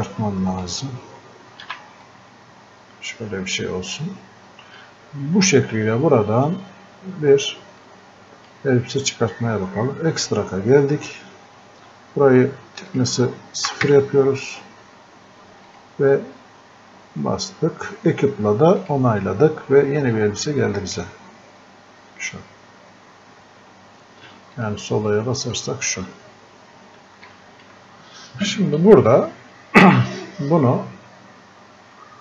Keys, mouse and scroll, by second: 12.9 click, 15.7 click, 18.8-32.2 drag, 22.9 typing.